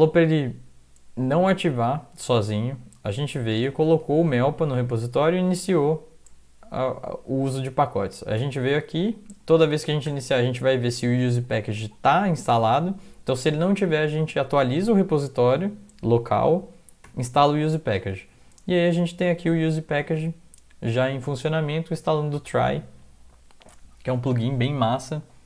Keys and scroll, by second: 2.4 Down, 2.6 Down, 2.8 Down, 3.3 Up, 3.6 Down, 3.8 Down, 4.0 Down, 4.7 Down, 8.4 Down, 10.0 shift+Home, 10.8 Right, 11.7 End, 13.6 Down, 17.0 Down, 18.1 Down, 18.3 Down, 18.4 Down, 18.6 Down, 19.3 Down, 19.9 Up, 20.1 Up.